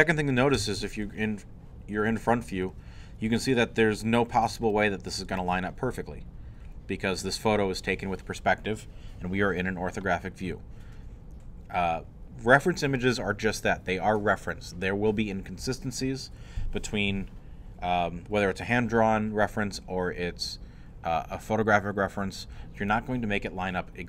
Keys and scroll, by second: 0.6 i.